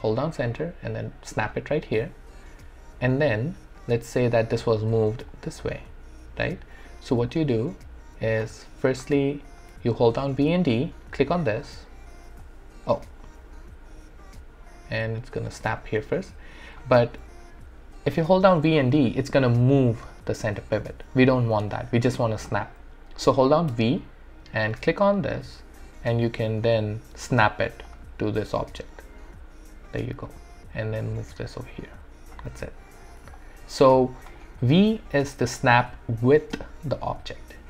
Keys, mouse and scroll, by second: 0.0-1.8 typing, 4.4-7.3 drag, 7.3 alt+click, 7.3-8.7 alt+drag, 9.0-10.3 alt+drag, 10.3-16.0 typing, 18.4-20.6 typing, 22.9 d, 24.2-29.3 typing, 24.6 click, 27.9 click, 30.4-33.2 typing, 31.1 click, 31.2 click, 33.4 alt+click, 34.4 right click, 34.9 alt+middle click, 35.4 alt+right click, 36.5-37.6 drag.